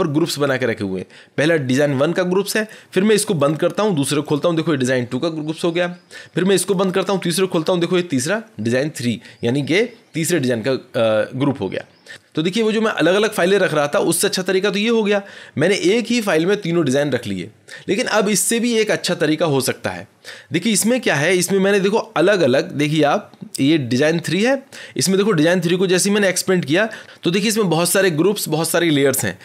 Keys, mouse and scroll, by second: 3.4 click, 4.2 click, 6.6 click, 7.6 click, 24.4 click, 26.3-26.6 scroll.